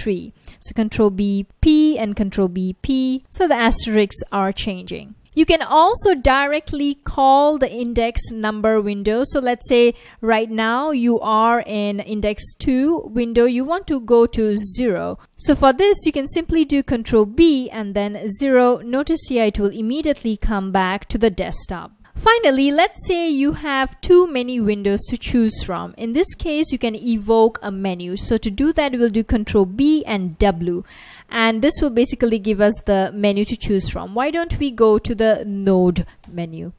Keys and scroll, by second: 0.7 ctrl+b, 1.1 p, 2.1 ctrl+b, 3.2 p, 3.3 p, 4.1 ctrl+b, 4.5 p, 11.5 F1, 15.1 F1, 17.4 ctrl+b, 17.8 0, 20.0 F1, 29.7 ctrl+b, 30.3 w, 31.9 Down, 32.1 Down, 32.3 Down, 32.7 Down, 33.1 Up, 33.9 Down, 34.8 Down, 35.0 Down, 36.3 Return.